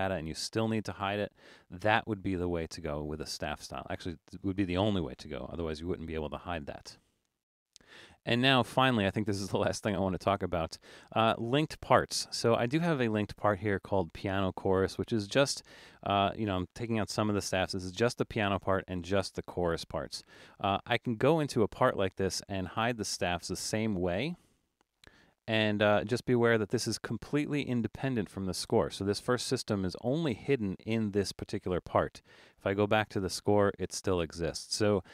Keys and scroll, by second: 0.2 super+z, 1.4 super+z, 5.6 super+-, 6.0 super+-.